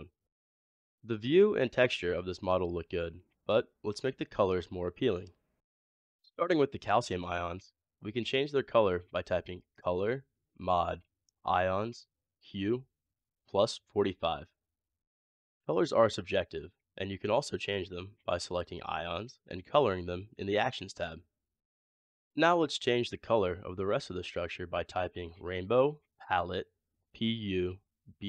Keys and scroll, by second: 8.3 typing, 15.6 typing, 24.8-25.5 typing.